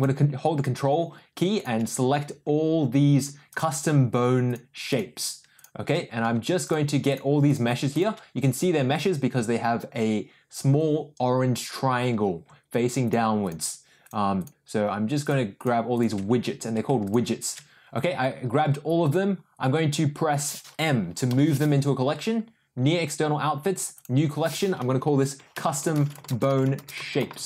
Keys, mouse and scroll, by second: 1.5 ctrl+click, 4.4 ctrl+click, 4.8 ctrl+click, 5.5 ctrl+click, 7.0 ctrl+click, 7.4 ctrl+click, 7.9 ctrl+click, 13.0 ctrl+click, 13.5 ctrl+click, 14.0 ctrl+click, 14.3 ctrl+drag, 15.5 ctrl+click, 15.9 ctrl+click, 17.4 ctrl+click, 21.2 m, 27.1 BackSpace.